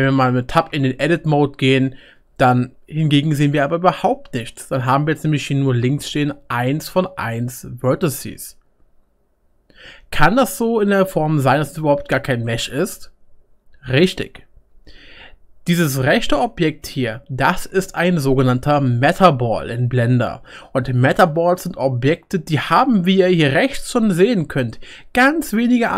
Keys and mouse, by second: 0.7 Tab, 14.7 Tab.